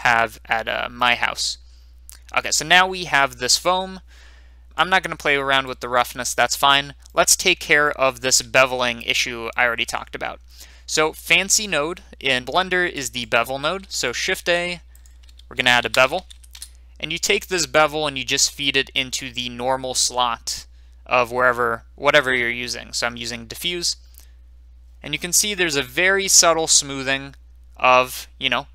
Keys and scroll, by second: 14.3 a, 15.5-16.3 typing, 16.5 Return.